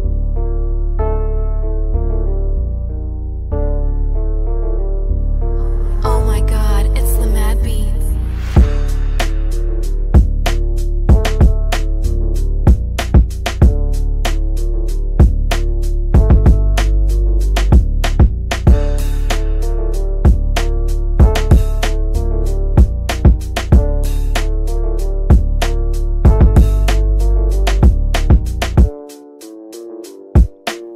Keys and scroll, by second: 17.7 ctrl+r, 22.6 c, 24.3 e.